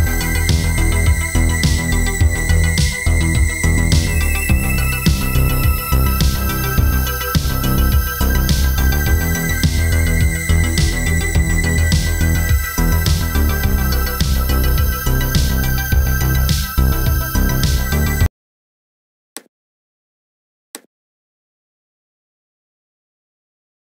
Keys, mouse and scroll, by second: 0.6 KP_0, 1.2-1.6 scroll up 5, 2.1 click, 5.1 click, 5.9 click, 9.0 scroll down 3, 9.7 click, 9.7-10.1 scroll down 3, 11.3 typing, 11.8 click, 12.8 click, 14.2 typing, 14.7-15.2 scroll up 5, 15.5 click.